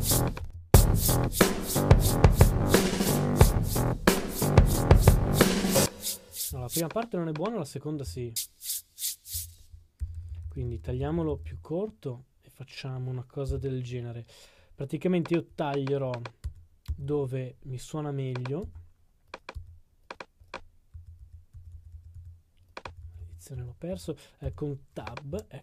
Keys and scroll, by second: 16.4 Tab, 16.8 s, 17.7 s.